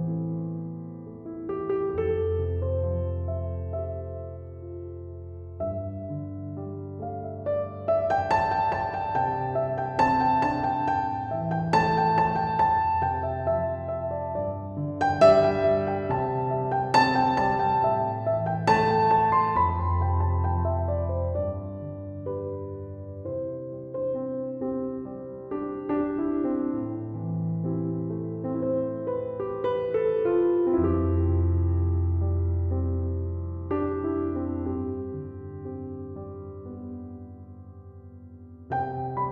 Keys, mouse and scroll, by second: 0.1 1, 0.7 5, 1.1 Return, 15.0 1, 15.4 4, 15.8 7, 16.5 Return, 25.3 7, 25.5 0, 25.9 Return, 27.8 Escape.